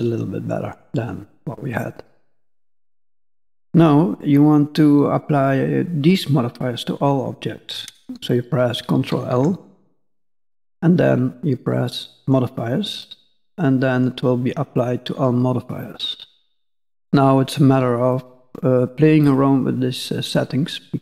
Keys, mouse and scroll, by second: 1.0 scroll down 4, 1.2 middle click, 2.5 middle click, 3.4 middle click, 4.5-6.1 scroll up 1, 9.2 ctrl+l, 13.0 middle click, 14.5 scroll up 1, 14.7 middle click, 15.9-16.8 scroll up 4, 16.8-17.5 scroll up 1, 18.1 middle click, 19.3 click.